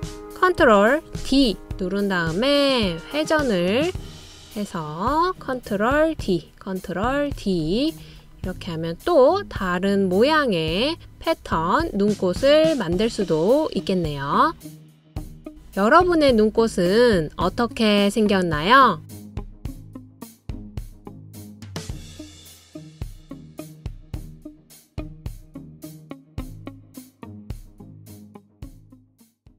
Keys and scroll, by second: 2.5 super+d, 7.8 super+d, 8.8 super+d.